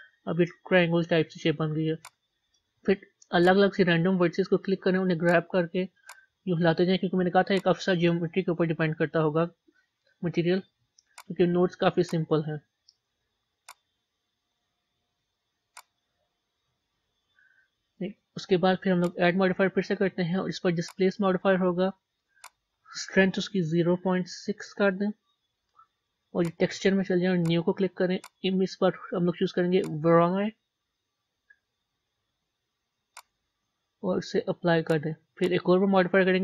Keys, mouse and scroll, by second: 0.0 Tab, 2.0 click, 3.5 click, 4.7 g, 6.1 click, 7.0 g, 7.8-11.2 middle drag, 11.2 click, 11.6 g, 12.4-13.7 middle drag, 13.7 click, 14.1-15.2 middle drag, 15.2 g, 16.5 Tab, 17.3-18.9 middle drag, 20.9-35.0 drag.